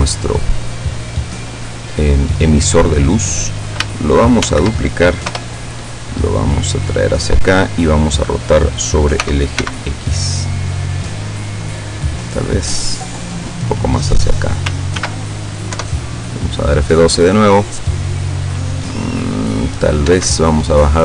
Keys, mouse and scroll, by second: 1.0 scroll down 1, 2.4 right click, 4.4 shift+d, 5.3 Return, 6.0-7.6 drag, 9.3 r, 9.7 x, 12.0 click, 12.8-14.6 drag, 15.0 ctrl+s, 15.2 ctrl+click, 15.8 ctrl+F12, 20.1 Escape.